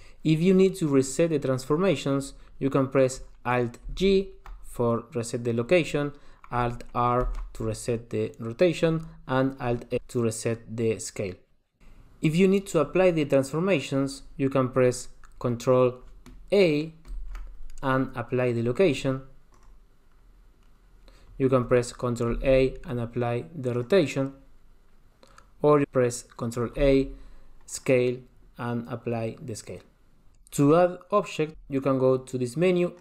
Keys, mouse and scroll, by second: 3.9 alt+g, 7.2 alt+r, 10.1 alt+s, 11.8 shift+middle click, 11.8-13.2 scroll down 2, 17.1 ctrl+a, 22.3 ctrl+a, 27.0 ctrl+a.